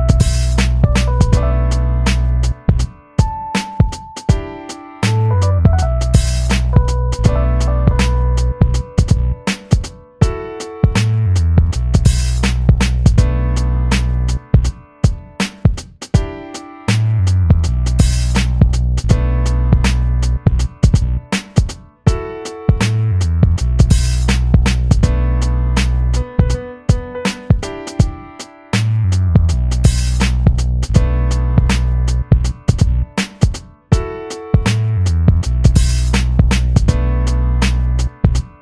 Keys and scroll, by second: 0.0 ctrl+d, 0.5 ctrl+d, 1.0 ctrl+shift+], 1.3 ctrl+[, 1.4 ctrl+[, 1.8 ctrl+d, 2.0 ctrl+], 2.2 ctrl+d, 2.3 ctrl+], 18.2 ctrl+-, 20.7 ctrl+=, 28.6 ctrl+=, 30.4 ctrl+-, 31.7 u, 35.7 ctrl+=.